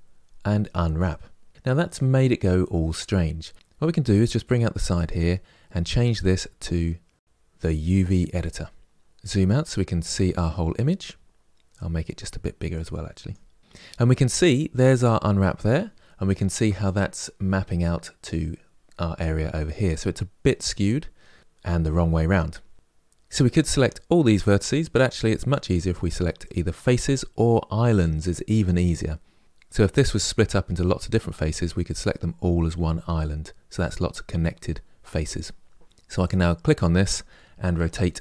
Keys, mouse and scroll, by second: 1.4 u, 4.1-5.7 drag, 12.0-36.0 drag, 37.6 r.